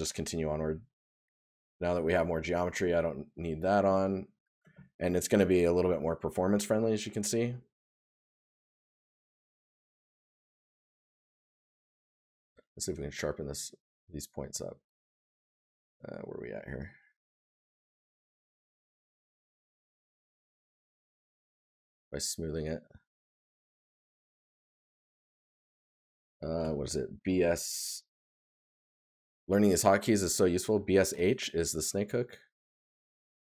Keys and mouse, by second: 3.4 right click, 6.7 right click, 8.0 right click, 10.4 right click, 14.3 right click, 20.8 right click.